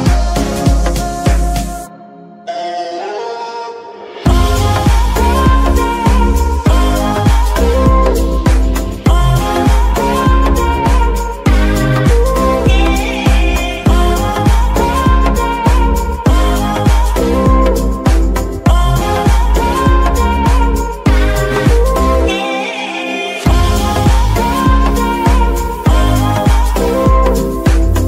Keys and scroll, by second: 0.2 Escape, 1.7 r, 3.0 Escape, 5.6 r, 8.6 Escape, 9.9 r, 10.1 r, 12.6 Escape, 14.5 r, 18.5 Escape, 20.1 g, 21.1 Escape, 24.1 z, 27.4 alt+Escape.